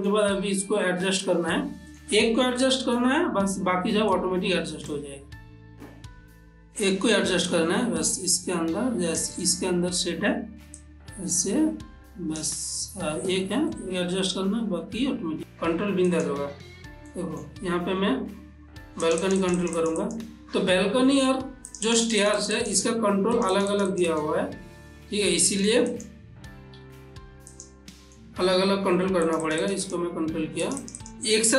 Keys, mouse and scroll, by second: 0.6-4.3 ctrl+middle drag, 4.3-11.0 shift+drag, 11.0-13.6 shift+drag, 13.9-15.4 middle drag, 15.4 click, 16.3 click, 17.3 ctrl+middle click, 19.2 click, 21.9 click, 23.6 click, 25.6 middle click, 26.1 click, 27.0 ctrl+s, 27.7 click, 28.1 middle click, 29.4 click.